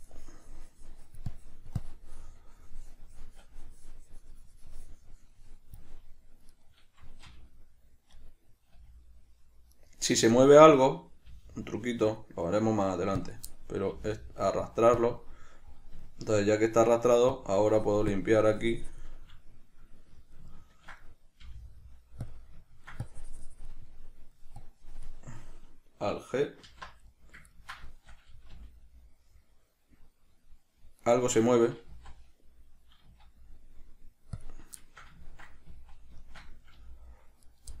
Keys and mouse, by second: 6.8 right click, 7.5 g, 8.6 right click, 9.0 g, 10.1 right click, 10.6-13.5 middle drag, 11.5 g, 13.5 click, 13.8-15.3 middle drag, 14.2 g, 15.3 click, 15.5-17.6 middle drag, 17.6-19.5 drag, 19.5-20.5 middle drag, 21.7 g, 22.6 click, 22.9 ctrl+middle click, 23.3 click, 24.2 middle click, 24.9-27.4 drag, 26.9 alt+g, 27.4 middle click, 28.8-31.4 middle drag, 28.8 g, 31.4 right click, 32.2 z, 32.6-37.8 middle drag, 33.3 z, 35.9 z, 37.0 g.